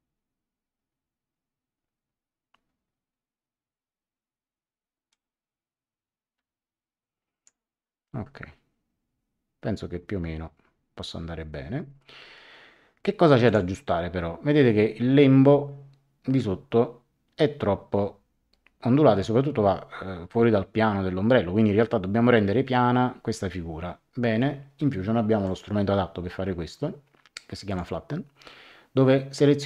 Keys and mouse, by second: 5.1 click, 13.4 click, 25.4 click, 27.6 click.